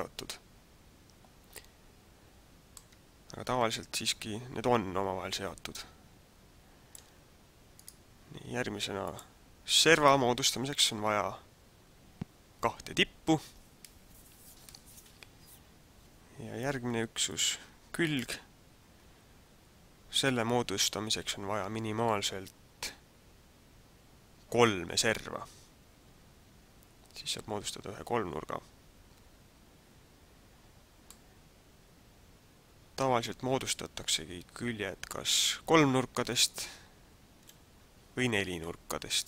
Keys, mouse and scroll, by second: 3.0 middle click, 7.8 right click, 9.0 click, 9.9 right click, 17.3 click, 18.2 right click, 31.2 middle click.